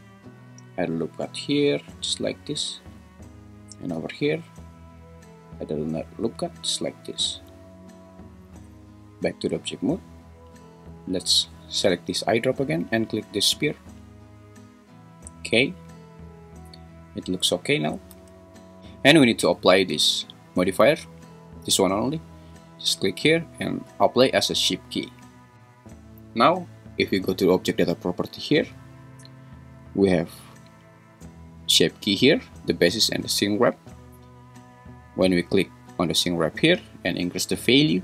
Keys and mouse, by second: 2.6 Escape, 3.9 ctrl+r, 7.3 Escape, 8.6 Tab, 18.4 `, 22.5-25.1 drag, 37.7-38.0 drag.